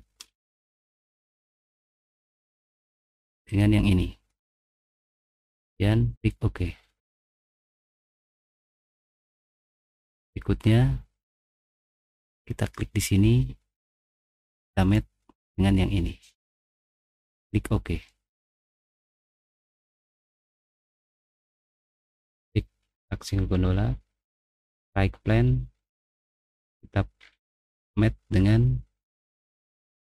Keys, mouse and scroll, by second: 0.2 middle click, 1.2 middle click, 1.8 middle click, 1.8 scroll up 1, 2.0 scroll down 1, 2.2 middle click, 3.5 click, 5.0-6.1 middle drag, 6.7 middle click, 7.5 scroll down 1, 7.6 middle click, 7.6 scroll up 1, 7.7 scroll down 1, 8.7-9.3 scroll up 2, 9.3 middle click, 10.2-10.9 scroll down 2, 12.6 middle click, 13.6 middle click, 17.0 click, 17.9 middle click, 17.9-19.8 scroll down 4, 19.0 middle click, 19.8 middle click, 20.1 middle click, 20.2 middle click, 24.7 click, 25.9 scroll down 1, 26.6 scroll up 1, 27.2 middle click, 27.2-27.9 scroll down 2.